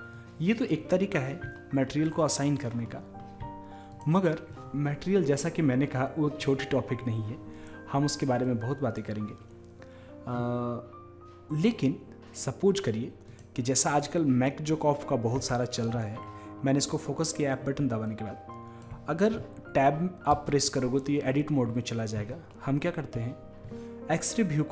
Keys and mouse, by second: 0.2-1.9 drag, 1.9-5.7 middle drag, 5.7 click, 8.4-10.4 drag, 13.3-15.2 drag, 18.1-19.9 drag, 20.4 Tab.